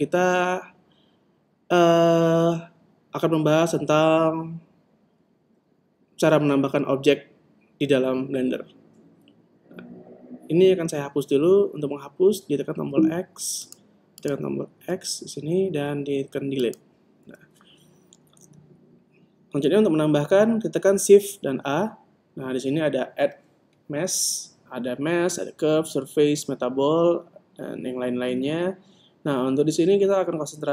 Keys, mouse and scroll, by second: 13.7-15.6 right drag, 14.9 x, 21.4 shift+a.